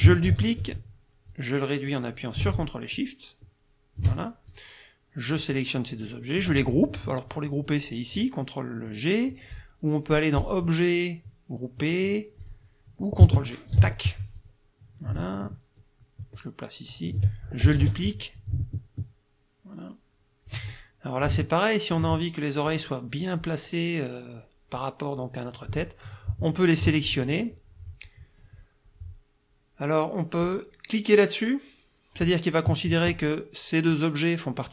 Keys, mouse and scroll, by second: 0.3 ctrl+d, 1.3-5.6 drag, 10.4 click, 12.4 click, 13.8 ctrl+g, 14.4-17.4 drag, 17.8 ctrl+d, 18.4-20.7 ctrl+drag, 21.3 ctrl+click, 26.5 shift+click.